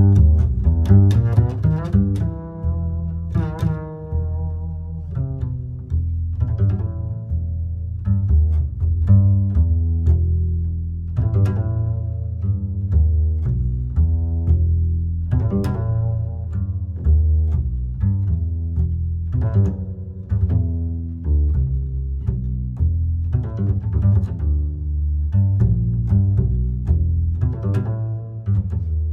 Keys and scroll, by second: 21.0 Delete, 27.1 ctrl+j.